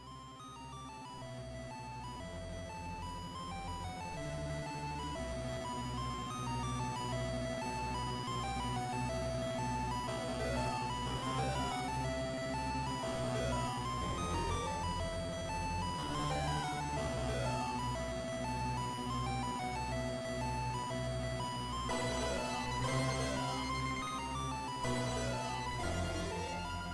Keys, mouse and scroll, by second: 24.1 click, 25.3-26.9 scroll down 2.